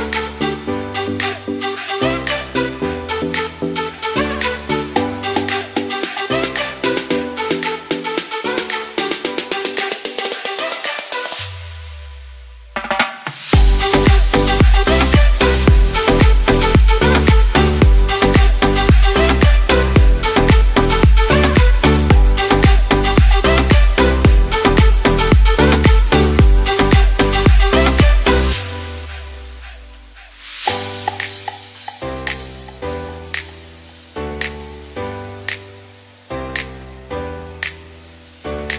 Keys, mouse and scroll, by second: 0.2 g, 0.4 x, 9.9 ctrl+z, 10.1 ctrl+z, 13.2 s, 15.1 s, 16.9 m, 17.7 g, 18.8 ctrl+z, 19.0 ctrl+z, 19.8 s, 22.4 g, 22.7 x, 25.6 ctrl+z, 25.7 ctrl+z, 25.9 ctrl+z, 28.5 ctrl+z, 28.5 ctrl+z, 28.7 ctrl+z, 29.1 ctrl+z, 30.4 x, 30.9 shift+a, 32.5 g, 33.0 x, 34.5 s, 35.0 z, 37.1 r, 37.4 y, 37.5 9, 37.6 0.